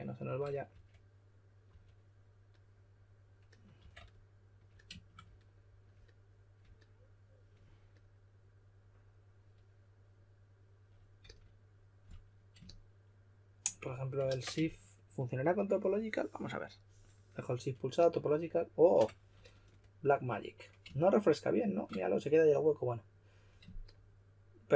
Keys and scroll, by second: 0.7-1.6 typing, 3.7 typing, 11.2 s, 14.2 super+z.